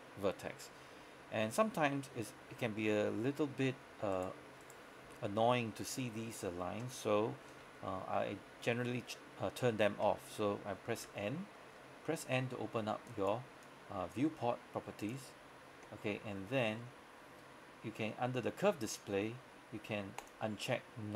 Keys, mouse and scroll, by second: 11.1 n, 12.0 scroll down 1, 12.2-12.6 scroll up 1, 13.1 click, 16.3 scroll down 1, 20.3 click.